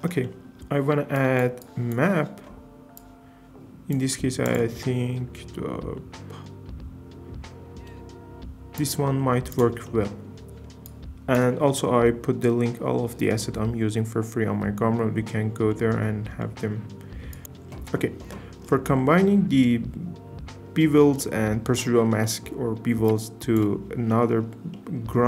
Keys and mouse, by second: 15.7 middle click, 17.3 click, 17.4 m, 17.4 i, 17.4 shift+d, 18.9 click, 23.1 click, 24.1 click.